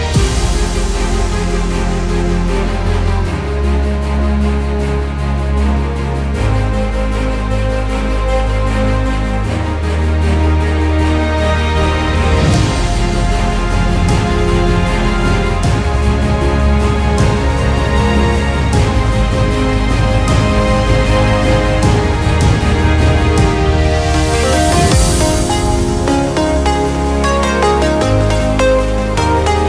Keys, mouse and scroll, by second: 1.8 click, 3.4 n, 4.5 click, 5.8 click, 6.9 click, 8.3 KP_7, 9.5 n, 10.5 Tab, 11.8 w, 14.1-15.1 drag, 17.5 w, 22.6-23.6 drag, 24.6 KP_Enter, 26.1 middle click, 26.9 click, 27.0 middle click, 27.0 click, 27.1 middle click, 27.2 KP_Decimal, 29.1 Tab.